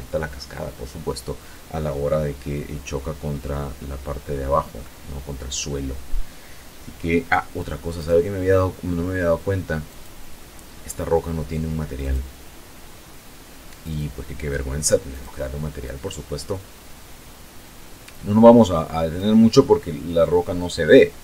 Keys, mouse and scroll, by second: 3.7 middle click, 6.9 right click, 8.8 click, 11.0 click, 12.8 click, 14.0 click, 14.8-18.3 drag.